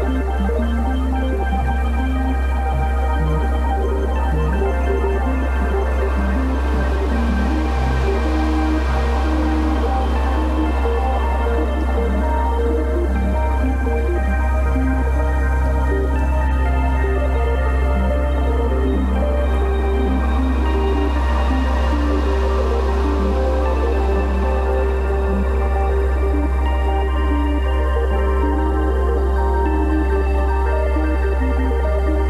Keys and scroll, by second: 0.4 shift+space, 4.9 b, 5.3 ], 7.4 x, 8.6 [, 9.7 [, 10.6 ], 11.5 [, 12.6 ], 13.3 v, 28.0 super+e, 28.9 Delete.